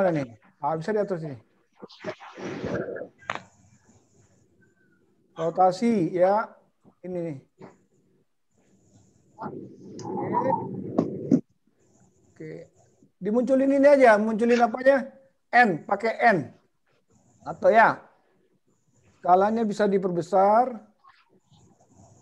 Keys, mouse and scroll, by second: 1.0 click, 3.1 click, 5.1 click, 7.0 click, 8.8 click, 10.5 click, 12.7 click, 20.1 click, 21.8 click.